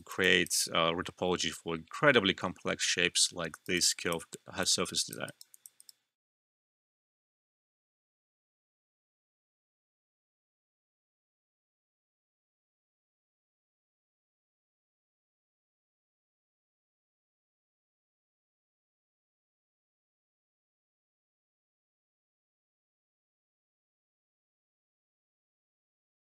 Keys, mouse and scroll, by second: 0.2 alt+click, 3.5 alt+click, 3.6 alt+right click, 3.9 alt+click, 4.3 alt+middle click, 4.6 alt+click, 5.2 alt+right click, 5.5 alt+click, 5.7 alt+right click, 6.0 alt+middle click.